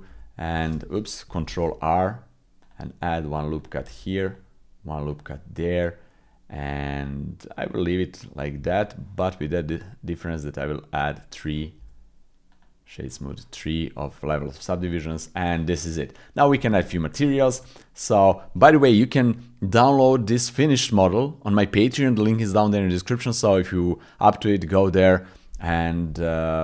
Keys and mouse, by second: 0.1 ctrl+e, 1.5 ctrl+r, 3.8 ctrl+r, 8.5 Tab, 12.6 w, 15.2 click, 16.6 shift+click, 16.9 click, 25.9 click.